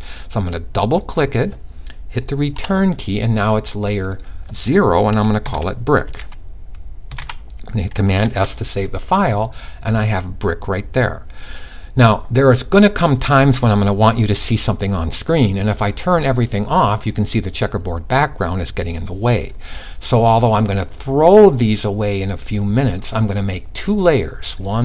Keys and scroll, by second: 5.0-6.6 typing, 7.8 super+s, 7.8 typing.